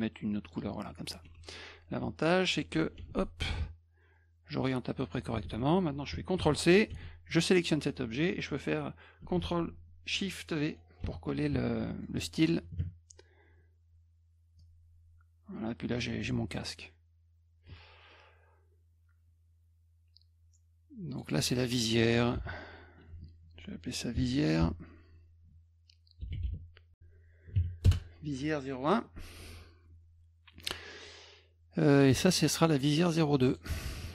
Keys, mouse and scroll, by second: 0.4 click, 1.2 F1, 3.6-5.1 drag, 6.4 c, 6.9 F2, 7.6 click, 11.0 ctrl+shift+v, 12.0 middle click, 14.6-16.0 drag, 21.1 click, 21.2 click, 22.3 v, 23.1 Caps_Lock, 24.1 Caps_Lock, 24.6 Caps_Lock, 25.9-26.8 typing, 27.8 Return, 32.7 click, 33.3 click, 33.5 click.